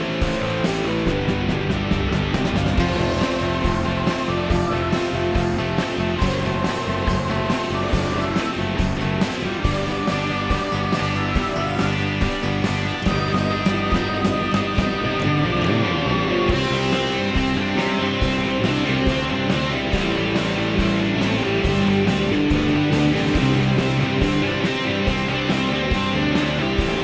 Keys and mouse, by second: 0.9 click, 1.7 x, 3.0 click, 3.7 x, 4.5-5.3 drag, 4.5-5.3 right drag, 5.7-6.0 shift+drag, 5.7-6.0 shift+right drag, 8.3 click, 8.3 right click, 8.7-9.2 drag, 8.7-9.2 right drag, 9.5 shift+middle drag, 9.9 middle drag, 10.4 ctrl+middle click, 11.0-12.0 middle drag, 12.9-13.8 drag, 15.0 click, 16.8 click, 17.3 click, 18.2-19.2 middle drag, 20.1-21.5 drag, 22.9-23.4 drag, 24.5 click, 25.8 s.